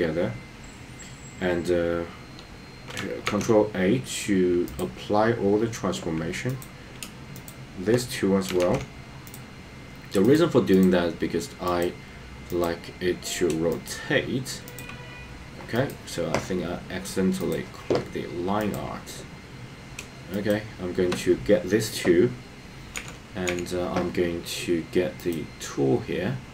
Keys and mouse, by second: 3.4 ctrl+a, 6.6 click, 7.5 shift+click, 8.6 ctrl+a, 15.8 click, 17.4 click, 22.9 n, 23.5 n.